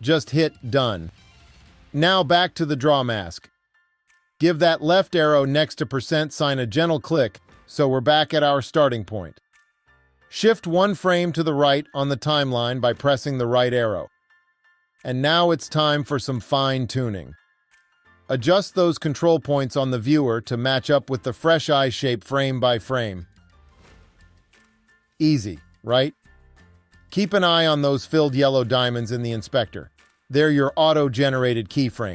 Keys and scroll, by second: 13.5 Right, 15.4 Right, 23.1 Right, 30.3 Right.